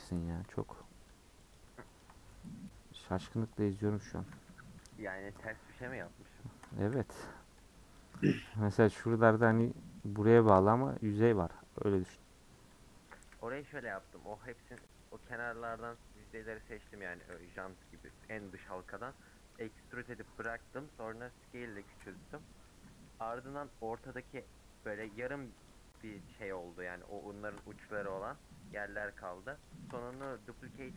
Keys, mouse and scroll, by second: 0.8 click, 1.6 click, 2.0 ctrl+click, 2.8 scroll down 1, 2.9-4.4 middle drag, 4.4 3, 4.9 click, 5.1 middle click, 6.0 shift+click, 7.6 c, 8.7 x, 9.1-12.7 middle drag, 12.7 c, 13.8 x, 14.0 middle click, 15.0 c, 15.9 x, 16.2-17.3 middle drag, 17.3 c, 18.4 x, 18.7-19.9 middle drag, 19.9 scroll down 1, 20.0-21.2 middle drag, 21.2-22.5 scroll up 2, 22.5-25.1 middle drag, 25.7 alt+click, 27.2 alt+shift+click, 27.8 middle click, 28.7 alt+shift+click, 29.6 alt+shift+click, 30.1 ctrl+z.